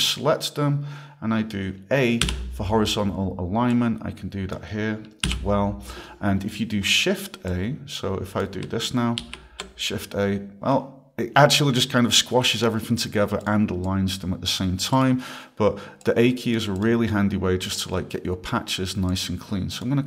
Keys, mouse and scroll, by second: 2.2 a, 3.7 click, 5.3 a, 7.2 click, 7.5 click, 9.2 shift+a, 13.4 click, 13.8 click, 15.0 click, 16.0 click, 16.7 click, 19.1 click.